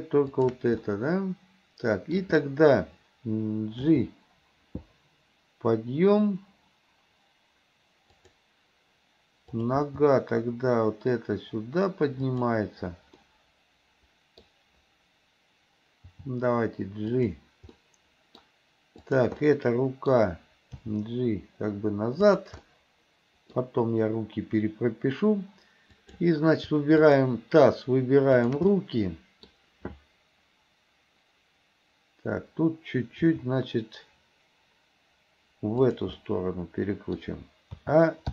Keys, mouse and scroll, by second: 0.3 shift+click, 0.9-2.2 middle drag, 3.8 g, 9.6 click, 9.8 g, 13.2 middle click, 13.5-16.2 middle drag, 16.2 g, 17.8 middle click, 19.1 click, 19.5 middle click, 20.8 g, 22.7 middle click, 26.0 click, 27.1 shift+click, 28.4 shift+click, 28.8 middle click, 33.3 r, 36.2-37.8 middle drag, 37.8 a.